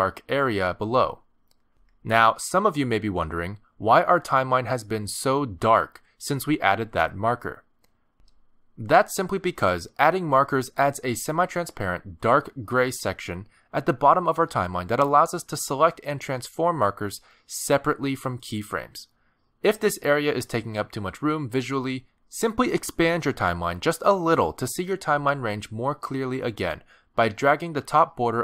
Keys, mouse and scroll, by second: 19.2 click, 21.8 click, 26.5 click, 27.3 click, 28.0 click.